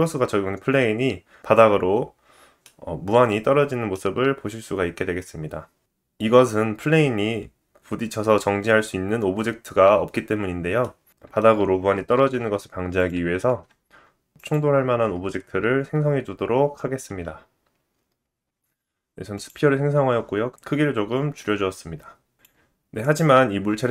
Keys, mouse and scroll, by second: 1.9 middle click, 4.9-11.5 drag, 5.1 middle click, 11.6 shift+click, 11.9 shift+a, 21.8 click, 22.3 click.